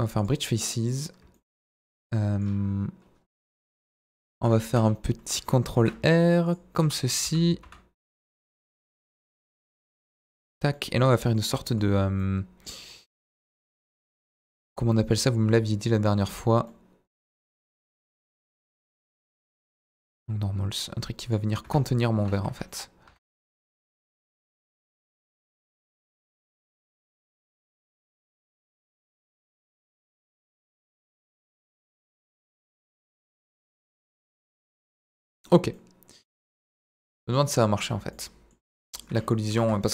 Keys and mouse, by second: 0.5 middle click, 1.5 middle click, 2.0 middle click, 3.8 KP_7, 5.8 ctrl+r, 6.8 Escape, 7.2 s, 7.6 z, 8.6 y, 10.3 click, 10.7 middle click, 11.5 z, 12.2 middle click, 14.4 z, 16.7 middle click, 17.8 middle click, 18.9 alt+e, 21.3 click, 21.6 Tab, 22.5 KP_1, 23.1 KP_7, 23.4 z, 26.5 s, 30.5 click, 31.2-31.7 middle drag, 31.7 z, 32.3-33.0 middle drag, 33.7-35.4 middle drag, 35.8-37.5 middle drag, 37.6 middle drag, 37.9 Tab, 38.1 middle click, 38.7 Tab, 38.8 middle click, 39.1 Tab, 39.5 Tab, 39.8 ctrl+a.